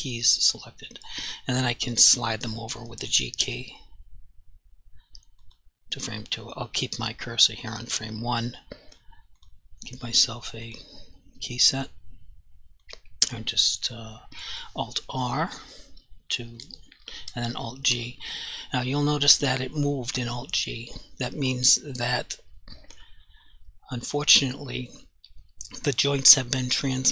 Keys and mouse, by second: 3.8 g, 5.5 click, 9.4 click, 16.6 alt+r, 17.9 alt+g.